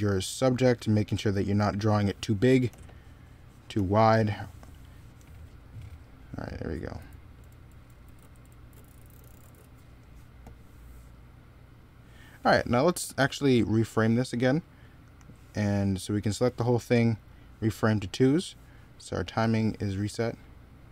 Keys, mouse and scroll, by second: 2.5 e, 3.5 b, 6.8 z, 7.2 x, 8.5 z, 14.9 right click.